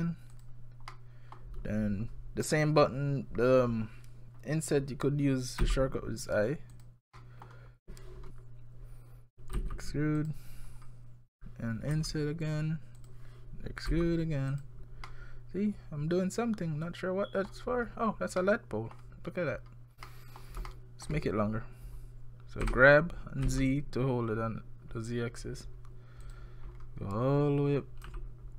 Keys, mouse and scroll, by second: 0.9 middle click, 5.6 i, 7.2 middle click, 8.1 scroll down 4, 9.6 e, 10.7-12.0 scroll down 4, 12.0 i, 13.9 e, 15.1 middle click, 17.7-18.4 scroll down 5, 18.4 middle click, 19.5-20.1 scroll up 5, 20.1 middle click, 20.7 shift+middle click, 22.6 g, 26.7-27.8 scroll down 1, 27.8-28.1 scroll down 2, 28.1 g.